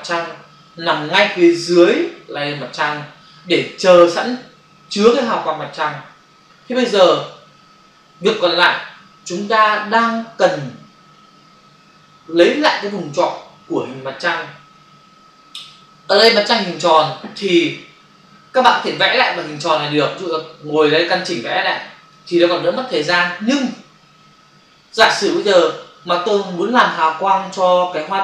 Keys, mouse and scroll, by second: 19.2 click, 20.7 shift+click, 23.5 ctrl+d.